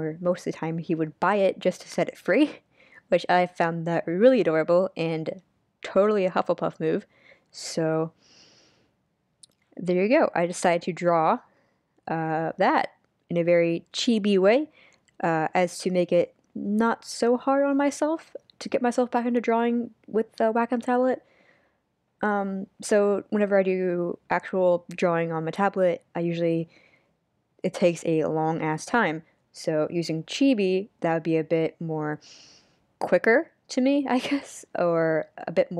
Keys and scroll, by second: 0.5 super+z, 1.2 super+z, 25.1 super+z, 27.2 super+z.